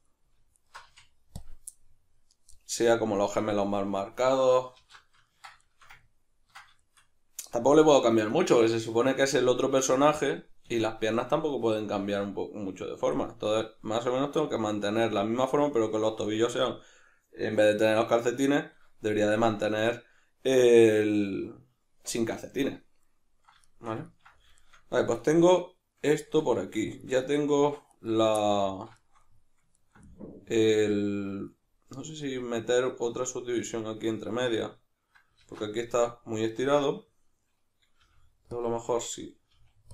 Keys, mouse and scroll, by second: 0.5 alt+shift+right click, 0.8 x, 1.7-14.5 middle drag, 4.8 alt+q, 23.7 shift+middle click, 25.2-27.1 middle drag, 27.1 right click, 27.6 Tab, 27.9 right click, 28.4-38.6 middle drag, 35.4 alt+q, 36.6 Tab, 38.0 f, 38.6 click, 39.5 f.